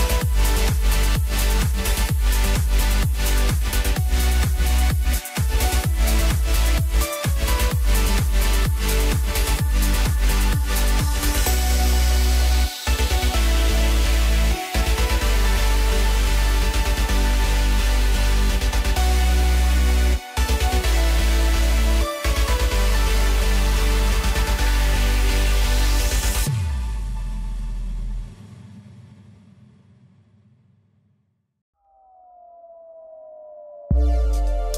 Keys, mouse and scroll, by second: 0.4 scroll down 3, 0.6-3.3 middle drag, 3.3 KP_Divide, 4.2 scroll down 2, 4.4-5.7 middle drag, 5.7-6.8 scroll up 2, 6.8 click, 7.3 Tab, 8.0 click, 9.1-10.3 drag, 12.4-13.6 scroll down 4, 13.6-15.5 drag, 16.0-17.9 middle drag, 17.9 KP_1, 19.3 click, 19.7 scroll up 1, 20.0 scroll down 2, 20.3-21.3 middle drag, 21.3 click, 22.5 KP_Divide, 23.2 scroll down 2, 23.5-24.7 middle drag, 24.7-28.0 drag, 30.1-30.5 scroll up 1, 30.5 scroll down 2, 30.7 middle click, 31.4 KP_3, 32.0-32.3 scroll up 1, 32.3 Tab, 32.7 scroll up 2, 33.8 ctrl+r.